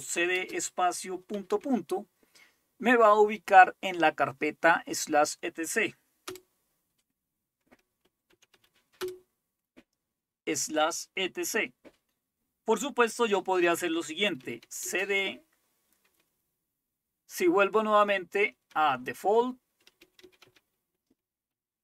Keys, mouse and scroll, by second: 0.0-1.5 typing, 6.3 Return, 7.8-10.7 typing, 9.1 Return, 14.4-14.8 typing, 18.7-21.5 typing.